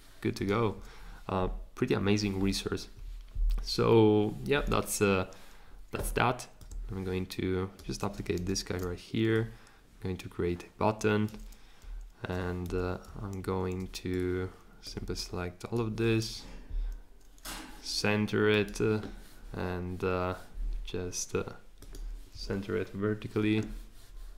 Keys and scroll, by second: 8.3 r, 12.6 v.